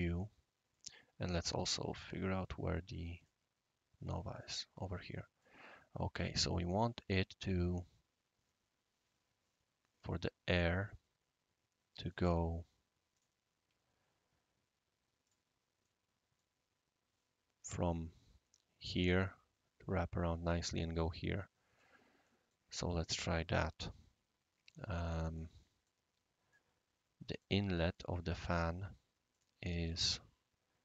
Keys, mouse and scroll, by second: 0.1-0.7 scroll down 1, 0.7 right click, 2.0 typing, 3.1 click, 4.3 click, 5.1 middle click, 10.8-12.1 right drag, 13.1 click, 15.2 click, 15.8 middle click, 22.2 middle click, 23.2 click, 25.0 right click, 25.6 middle click, 26.5 right click, 27.9 right click, 28.3 Escape, 29.3 click.